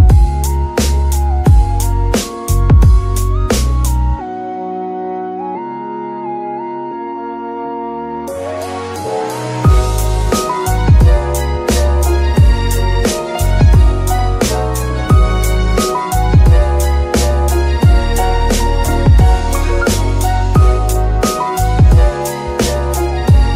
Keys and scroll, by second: 2.0 Escape, 2.6 r, 2.8 r, 6.6 Escape, 8.2 r, 8.3 r, 10.5 Escape, 11.2 r, 11.4 r, 14.2 g, 15.9 Escape, 18.1 shift+g, 20.2 alt+g, 20.6 alt+r, 21.4 alt+g, 23.4 Escape.